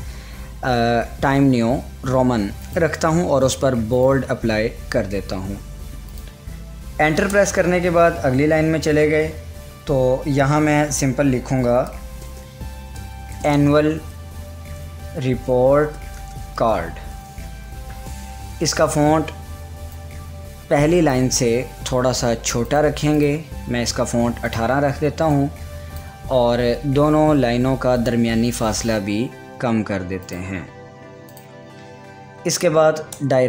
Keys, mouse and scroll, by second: 2.7 click, 2.7 click, 6.1 click, 7.3 Return, 11.7-17.2 typing, 20.0-28.0 drag, 30.3 click, 33.1 Return.